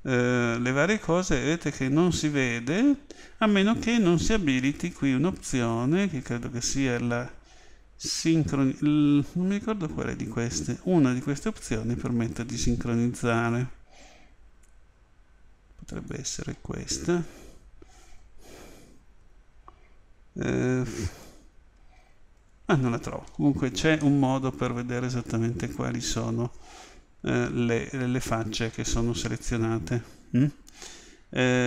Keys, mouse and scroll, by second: 0.2 l, 6.2 click, 18.7 a, 19.2 a, 21.0-22.9 right drag, 22.4 a, 24.0-26.0 middle drag.